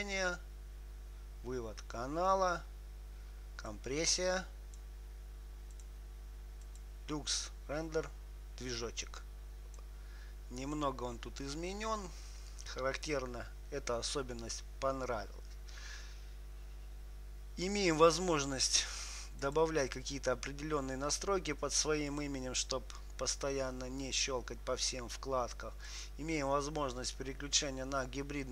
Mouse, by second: 4.0-15.8 drag, 17.9-22.5 drag, 26.2-28.3 drag.